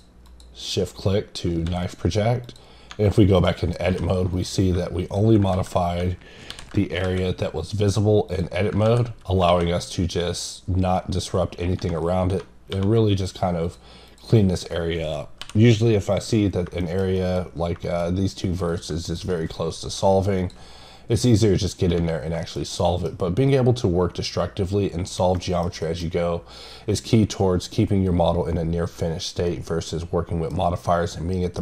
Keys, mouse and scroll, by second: 1.0 scroll up 1, 1.9 click, 2.4 click, 2.7 scroll up 3, 3.4 middle click, 4.3 click, 5.0 click, 7.2-7.8 scroll down 3, 8.3 click, 12.4-13.1 scroll up 3, 13.1 click, 13.6 click, 16.1 click, 16.5-16.8 scroll down 1, 16.8 middle click, 17.0 scroll down 1, 17.1 middle click, 17.5 scroll up 2, 17.8 middle click, 18.0 scroll up 3, 18.7 click, 19.1 click, 20.4 click, 20.7-21.1 scroll down 3, 22.1 scroll down 2, 22.4 middle click, 25.5 middle click, 25.8 double middle click, 29.0-29.5 scroll down 2, 29.5-31.6 middle drag.